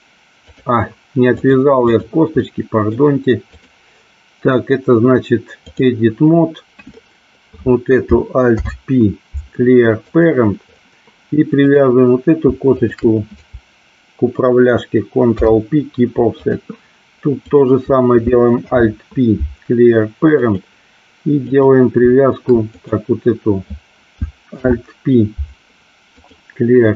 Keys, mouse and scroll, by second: 1.5 click, 2.4-2.9 middle drag, 3.7-5.9 drag, 8.6 alt+p, 11.7 click, 12.8 shift+click, 15.3 ctrl+p, 17.5 click, 18.7 alt+p, 21.6 click, 24.7 alt+p.